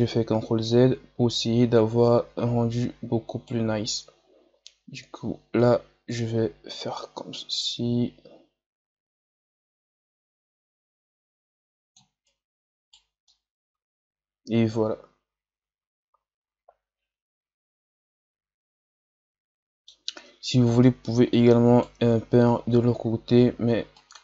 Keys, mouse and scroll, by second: 0.6-5.7 right drag, 5.7-8.5 drag, 12.2-13.2 right drag, 13.2-19.8 middle drag, 20.7-24.2 right drag.